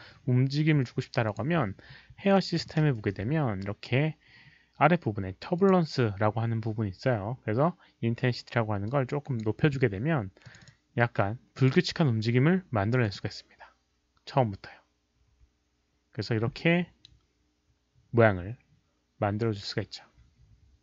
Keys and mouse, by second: 1.2 click, 2.8 ctrl+a, 3.9-5.5 middle drag, 5.5 click, 7.6 ctrl+a, 7.6 click, 8.8-9.3 drag, 9.2 ctrl+a, 10.4 click, 11.5 click, 12.1 ctrl+a, 13.0 click, 13.0 ctrl+a, 15.6 click, 16.3 click.